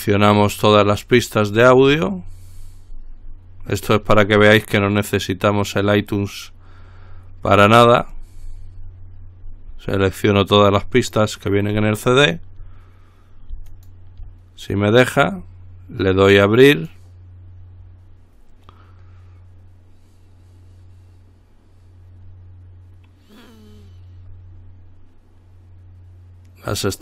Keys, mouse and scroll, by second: 1.7-4.8 scroll down 1, 4.8-5.5 scroll down 1, 6.0-10.2 scroll down 1, 12.2 shift+click, 13.9 shift+click, 17.0 click.